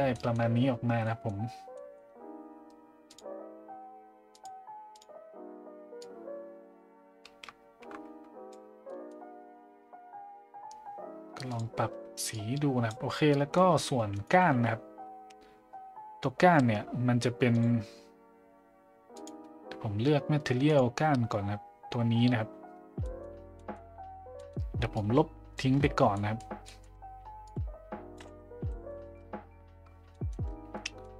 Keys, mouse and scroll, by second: 0.1 middle drag, 1.0 middle drag, 1.9 middle click, 3.1 click, 4.3 click, 4.9 click, 8.8 middle drag, 11.5 click, 13.3 middle drag, 19.2-20.8 drag, 23.1 middle click, 23.6 middle click, 24.5 middle click, 25.0-25.6 drag, 26.2 middle click, 26.8 middle click, 27.5-28.2 drag, 28.6 Delete, 28.9 middle click, 30.2 middle click, 30.9 middle click.